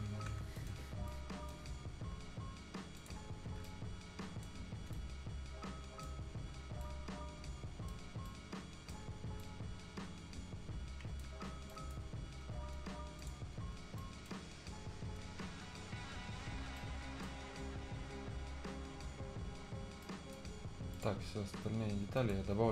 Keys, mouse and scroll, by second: 0.4 scroll up 1, 0.6 right click, 0.7-1.1 scroll down 1, 1.1 right click, 1.9 scroll down 1, 3.0 click, 3.3 scroll down 1, 3.7 right click, 4.6 scroll up 1, 4.9 right click, 6.2-6.5 scroll down 1, 6.8 right click, 8.0 scroll down 1, 8.3 right click, 9.1 scroll up 1, 9.4-11.3 right drag, 11.3 scroll down 1, 11.5 scroll up 1, 11.7 right click, 13.2 click, 13.5-13.8 scroll down 1, 13.8 scroll up 1, 14.0 right click, 14.4 scroll up 1, 14.8-15.2 scroll down 1, 16.8-18.9 right drag, 18.9-19.2 scroll down 1, 20.0 right click, 20.5 scroll down 1, 20.9 click, 22.5 scroll down 1.